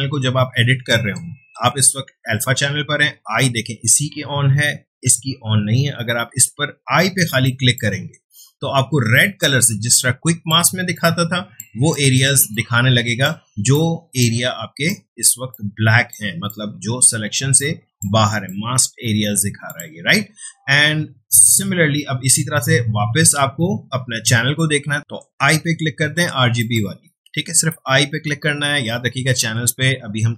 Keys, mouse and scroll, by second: 7.4-9.1 drag, 9.1 ctrl+space, 9.4-11.8 ctrl+drag, 11.8 space, 11.9 click, 12.3 space, 12.5 click, 12.6 space, 13.7 click, 13.8 space, 14.8 click, 15.3 space, 15.5 click, 15.8 space, 16.4 click, 16.6 space, 17.6 click, 18.2 space, 18.4 ctrl+click, 25.0 click, 28.0 space.